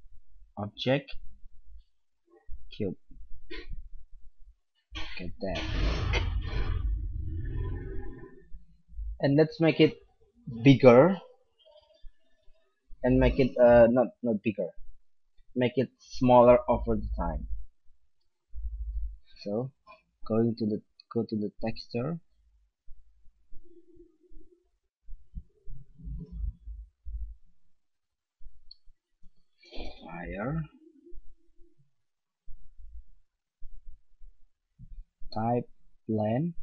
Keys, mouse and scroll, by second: 0.8-3.2 drag, 20.6-24.2 drag, 27.5-29.3 drag, 31.2-32.9 drag, 33.5-35.2 drag.